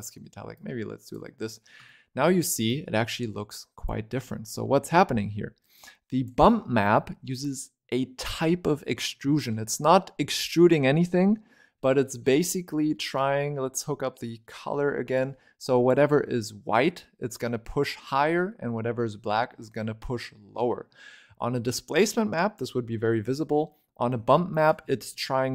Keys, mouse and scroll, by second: 1.3-1.7 scroll up 2, 1.7-3.0 shift+middle drag, 3.0 click, 5.7 click, 6.7-7.7 scroll down 2, 7.7-8.7 scroll up 4, 8.7-9.2 scroll down 2, 9.2-12.7 shift+middle drag, 12.7 scroll down 1, 12.8-15.0 middle drag, 15.0 click, 16.8 scroll up 4, 17.3-20.5 middle drag, 20.5-22.1 scroll down 5, 22.1-23.2 middle drag, 23.2 scroll up 1, 23.4 middle click, 24.4 ctrl+right click, 25.1 middle click.